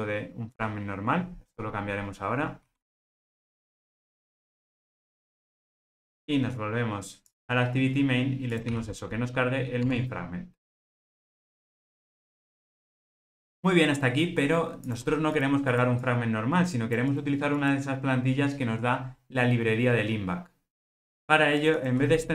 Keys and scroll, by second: 0.7 Return, 9.9 Tab.